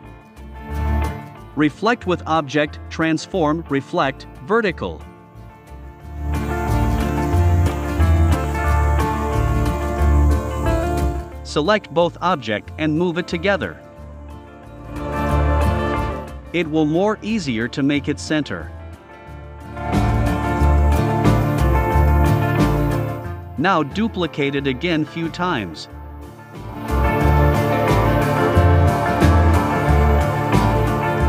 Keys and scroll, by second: 8.2 Right, 8.8 Right, 9.4 Left, 9.6 Right, 22.4 super+c, 22.8 super+f, 23.6 shift+Down, 25.7 super+c, 26.0 super+f, 26.8 shift+Down, 28.2 super+c, 28.6 super+f, 29.1 shift+Down, 30.8 super+c, 31.0 super+f.